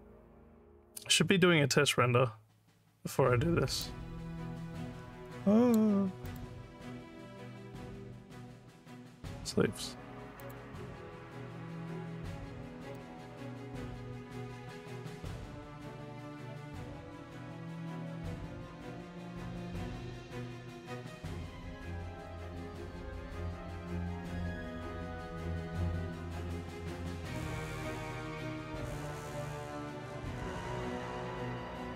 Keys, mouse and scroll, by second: 3.8-5.8 drag, 6.3 click, 9.4 s, 10.5 click, 13.0-21.3 drag, 22.3-25.1 drag, 26.0-31.9 drag.